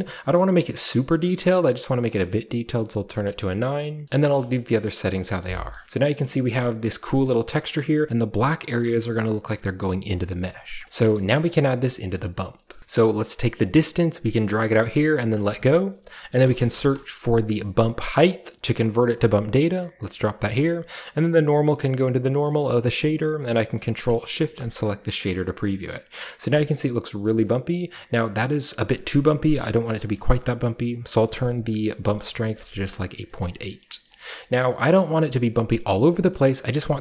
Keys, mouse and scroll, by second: 0.8 click, 2.3-3.2 scroll up 1, 4.5-5.9 drag, 5.8 shift+middle drag, 5.8-6.5 shift+scroll down 2, 6.2 shift+middle click, 6.5-7.2 shift+middle drag, 6.5-7.1 shift+scroll up 2, 7.1 shift+scroll down 2, 7.1-8.8 shift+scroll up 2, 7.5-8.8 shift+middle drag, 9.0-10.6 middle drag, 9.7 scroll down 2, 10.1 click, 10.6 click, 10.8 typing, 10.9 drag, 11.8 scroll down 1, 12.1 scroll up 1, 12.3 scroll down 1, 12.6-13.7 middle drag, 13.7-16.3 drag, 13.7-15.2 scroll up 1, 16.3-16.7 typing, 16.5-18.9 drag, 19.1-22.6 drag, 22.4 middle click, 24.6 ctrl+shift+click, 25.1-25.6 scroll down 2, 25.6 middle drag, 26.1-27.2 scroll up 2, 27.4 scroll up 1, 28.4-30.0 middle drag, 28.4-30.0 scroll up 1, 30.0 click, 32.1 typing, 32.1 Return, 33.1 scroll down 1, 33.4-33.9 middle drag, 34.0-35.1 shift+middle drag, 34.1-35.1 shift+scroll up 1, 35.1-35.9 shift+scroll up 1, 35.3 shift+middle click, 35.9-37.0 shift+scroll up 1, 36.3-37.0 shift+middle drag.